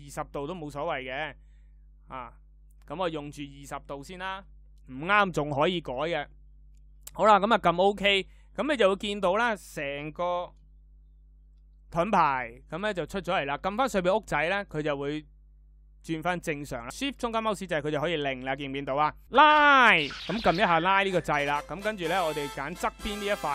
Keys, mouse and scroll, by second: 16.9-18.8 shift+middle drag.